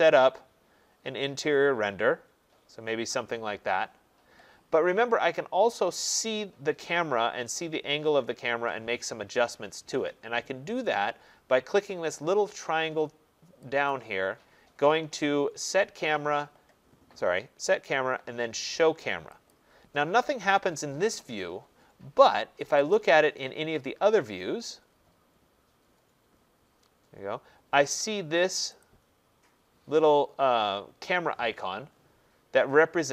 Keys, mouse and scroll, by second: 1.4 right click, 13.9 click, 19.5 click, 22.7 click, 22.9 click, 24.4-28.0 scroll, 28.0-28.8 scroll, 28.8 click, 30.0 scroll, 32.6-33.1 scroll.